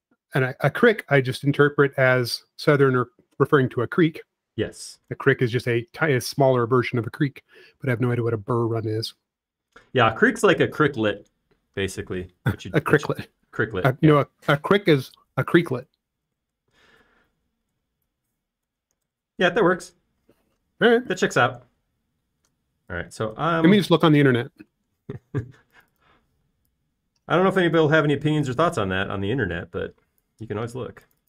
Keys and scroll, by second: 1.4 m, 1.9 m, 6.5-7.4 typing, 17.4-18.2 typing, 19.9-21.6 typing, 24.5 super+z, 24.7 super+z, 26.0 p, 26.8 space, 27.7 p, 30.3 typing.